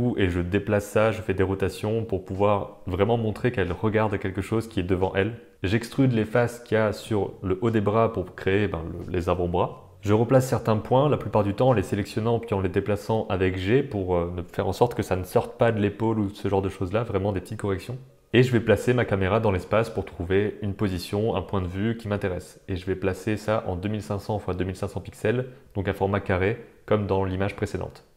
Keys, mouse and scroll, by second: 0.6 shift+click, 0.7 middle click, 1.3 middle click, 1.6-3.8 typing, 3.0 middle click, 4.2 middle click, 5.3 alt+a, 5.3 middle click, 5.5 g, 5.7 r, 7.3 e, 8.6 s, 9.3 g, 9.9 g, 9.9 alt+z, 9.9 click, 10.1 g, 10.5 alt+z, 10.7-16.7 middle drag, 16.7-20.2 typing, 17.6 Tab, 17.8 middle drag, 18.2 middle click, 21.0 click, 21.3 shift+click, 21.6 shift+n, 22.1 shift+click, 22.9 shift+g, 24.6-26.4 typing.